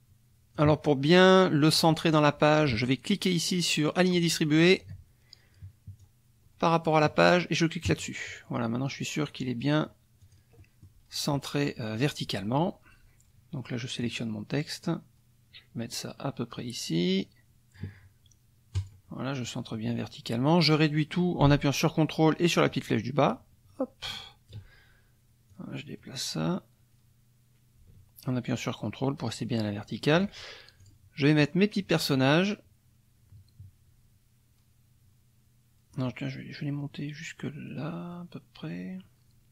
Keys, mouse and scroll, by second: 4.0 click, 6.0-7.2 drag, 7.9 click, 10.2 click, 10.6 click, 10.6 middle click, 14.0-18.0 drag, 18.7 click, 22.7-24.7 ctrl+drag, 25.5-30.3 drag, 30.8 click, 31.4-39.5 drag.